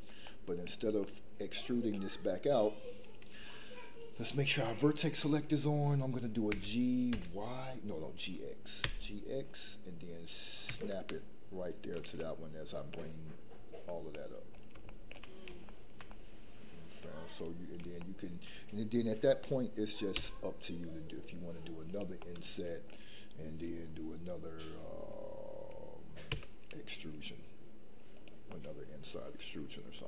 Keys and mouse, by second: 0.2 middle click, 1.0 middle click, 6.4 g, 7.1 y, 8.8 x, 12.2 middle click, 14.9 shift+middle click, 15.6-17.0 shift+middle drag, 18.0 shift+middle click, 20.1 i, 22.2 middle click, 26.3 e, 28.5-29.5 middle drag, 29.9 middle click.